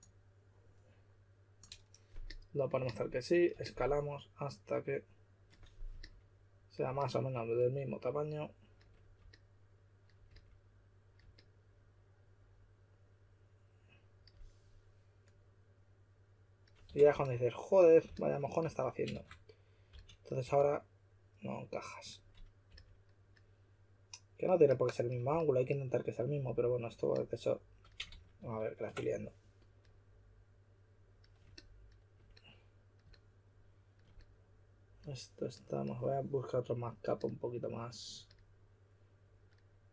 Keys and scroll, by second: 16.6-18.6 typing, 19.6-20.9 typing, 22.6 typing, 25.2 typing, 28.0 super+z, 28.3 super+z.